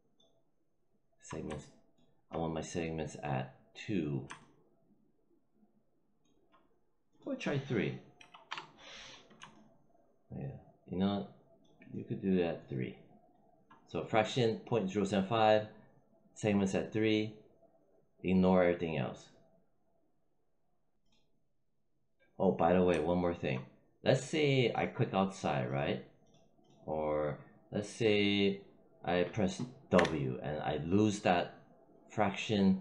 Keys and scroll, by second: 8.1 3, 8.4 Return, 29.8 w.